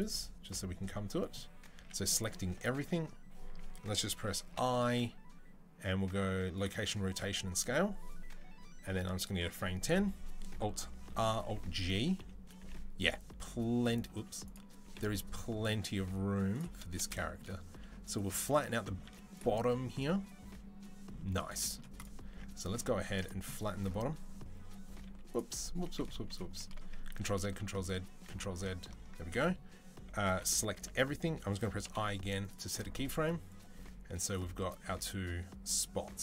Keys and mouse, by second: 1.6 a, 4.3 i, 10.9 alt+r, 11.2 alt+g, 12.4 g, 14.4-23.0 middle drag, 14.7 g, 18.9 z, 22.1 Tab, 22.9 Tab, 23.0 click, 23.1-26.0 middle drag, 24.9 z, 26.0 KP_3, 27.1 ctrl+z, 27.3 ctrl+z, 28.2 ctrl+z, 30.6 a, 31.7 i, 33.3-36.2 drag.